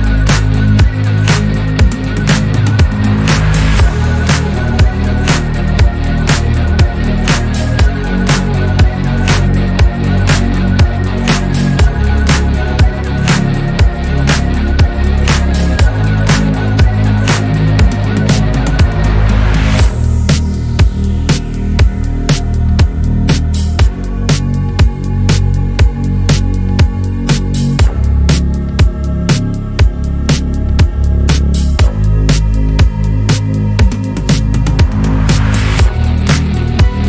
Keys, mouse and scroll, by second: 1.8 click, 3.7-4.1 shift+middle drag, 4.1 scroll up 1, 4.9 click, 6.5-8.5 drag, 9.7 shift+d, 11.1 r, 14.9 s, 17.5 g, 21.4-22.1 shift+middle drag, 22.1 click, 23.3 shift+d, 24.5 click, 25.6 s, 27.4-28.3 scroll up 3, 28.3 click, 29.0-30.2 shift+middle drag, 30.2 Tab, 31.0 alt+s, 34.8 click, 35.3 Tab, 35.6 scroll down 1, 35.9 shift+middle click, 36.7 click.